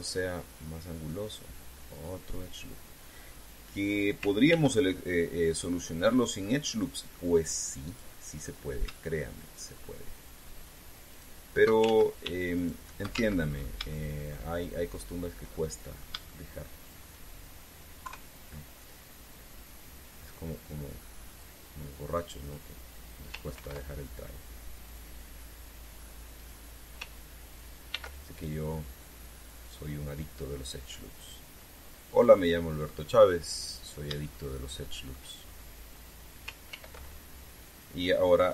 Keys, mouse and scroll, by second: 2.7 click, 5.2 ctrl+r, 6.3 click, 6.7 click, 7.2 middle click, 8.6 right click, 9.1 scroll up 2, 11.9 shift+right click, 12.6 ctrl+shift+z, 13.3 shift+right click, 13.9 ctrl+shift+z, 14.2-14.6 scroll up 2, 14.6 shift+middle click, 16.3 shift+middle click, 17.7 shift+scroll up 2, 18.8 KP_3, 20.4-23.4 drag, 24.3 ctrl+r, 25.6 click, 27.2 click, 28.6 ctrl+r, 29.1 ctrl+click, 33.0 click, 33.5-33.9 scroll down 2, 35.1 shift+middle click, 36.2-36.5 shift+scroll up 3, 37.4 ctrl+r, 38.4 click.